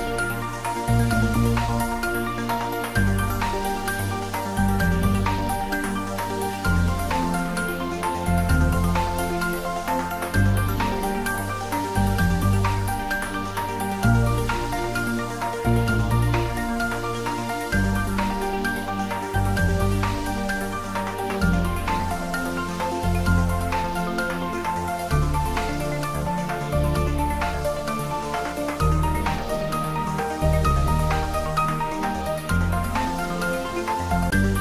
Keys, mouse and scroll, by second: 1.5 s, 8.2 click, 10.6 s, 12.0 click, 12.4 scroll down 1, 12.9-13.3 scroll up 1, 14.0 s, 15.9 click, 16.2 scroll down 1, 16.7-21.9 middle drag, 21.9 3, 23.3 shift+z, 24.1-25.5 drag, 25.5-29.2 shift+drag, 29.6 click, 31.0 shift+d, 31.3 r, 32.5-33.2 typing, 34.4 click.